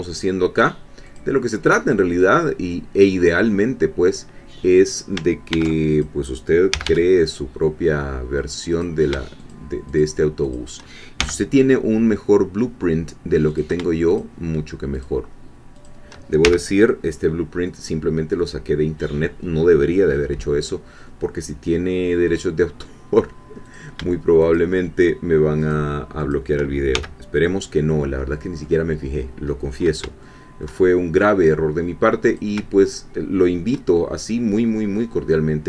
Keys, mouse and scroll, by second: 1.0 click, 1.8-5.2 middle drag, 5.5 ctrl+r, 5.9 ctrl+click, 6.7 g, 8.7 click, 9.4 shift+click, 10.0 shift+click, 11.2 shift+f, 13.6 click, 14.2 shift+click, 15.8 shift+click, 16.4 shift+f, 21.2-22.2 middle drag, 23.8 click, 24.4 shift+click, 25.7 shift+click, 26.9 shift+f, 27.4-28.8 shift+middle drag, 29.6-30.0 scroll up 2, 30.2 shift+middle click, 32.3 click, 33.9-35.6 shift+middle drag.